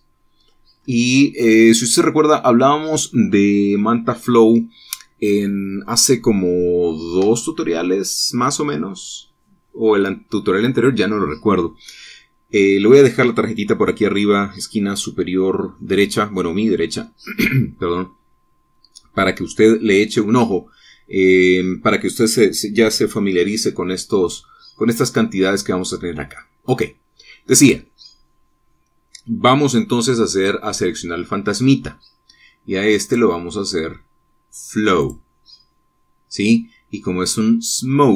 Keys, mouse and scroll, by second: 1.3-1.9 scroll up 2, 28.5 click, 34.0 click, 35.9 click.